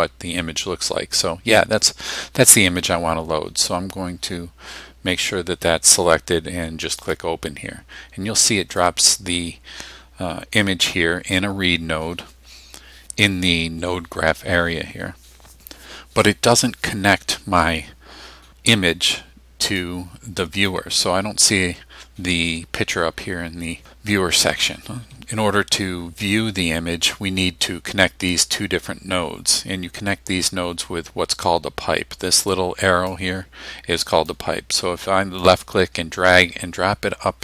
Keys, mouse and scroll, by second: 7.0 click, 8.8-11.5 drag, 19.8-20.9 drag, 33.1-34.5 drag, 35.5-37.4 drag.